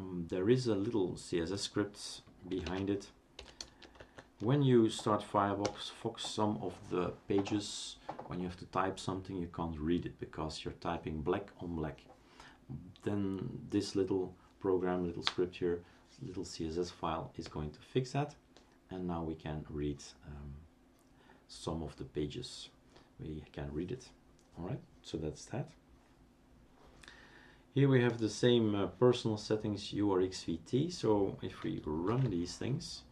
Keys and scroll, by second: 2.7-4.2 typing, 5.6 Return, 32.1 shift+super+d, 32.9-33.1 typing.